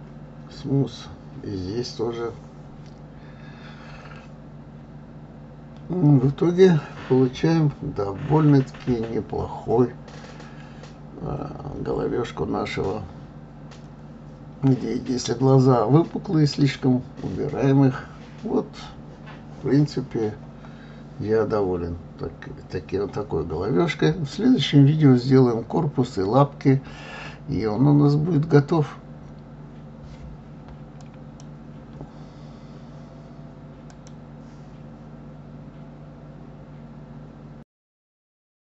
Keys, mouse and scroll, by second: 1.0 click, 1.4-3.3 right drag, 3.3 click, 3.7-6.5 right drag, 6.5-9.6 middle drag, 10.9 KP_3, 13.3 g, 15.4 click, 15.9-18.1 middle drag, 18.1-18.6 scroll up 2, 18.6-19.1 scroll down 2, 19.1-21.1 shift+middle drag, 21.1-21.6 scroll up 1, 21.6-22.7 scroll down 1, 22.7-23.1 scroll down 1, 23.1-26.1 shift+middle drag.